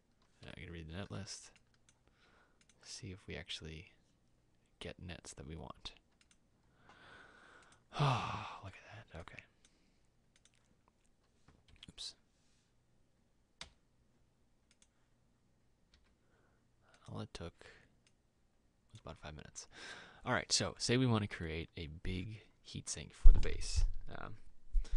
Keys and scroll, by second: 14.8 m.